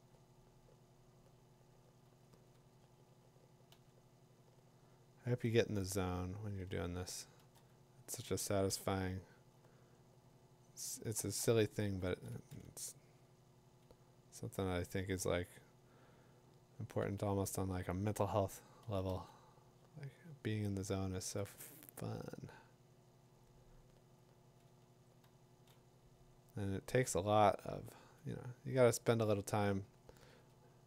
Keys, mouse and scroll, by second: 2.0 ], 2.3 ], 3.7 ], 4.8 click, 5.4 click, 7.0 click, 9.4-10.4 drag, 9.4 typing, 11.1 click, 11.8 2, 12.0 3, 12.3 4, 12.6 5, 15.1 [, 15.1 ], 17.0-19.1 typing, 21.3 click, 25.3 [, 29.1 click, 29.9 2, 30.0 3, 30.3 4.